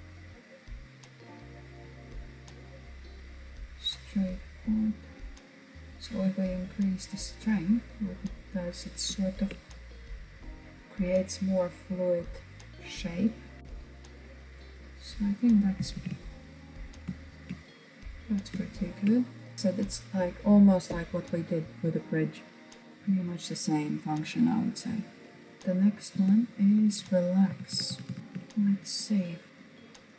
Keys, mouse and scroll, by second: 3.6-6.7 drag, 7.0-7.3 scroll down 2, 7.3-12.3 middle drag, 12.3-13.5 drag, 13.5 middle click, 15.0 alt+z, 15.4-20.9 middle drag, 22.8-23.8 middle drag, 23.8-24.9 scroll down 2, 24.9 shift+middle click, 25.6 Tab, 26.5-27.5 BackSpace, 28.2-28.8 scroll up 3, 28.8-30.1 shift+middle drag.